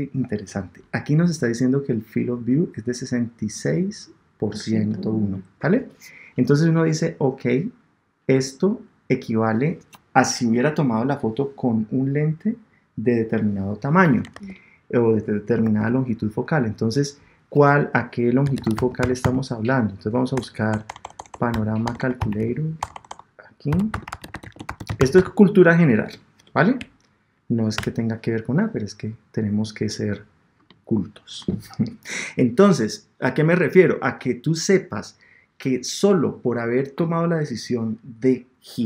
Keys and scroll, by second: 14.3 super+Tab, 15.6 super+Tab, 20.3 BackSpace, 26.8 Down, 27.7 Return.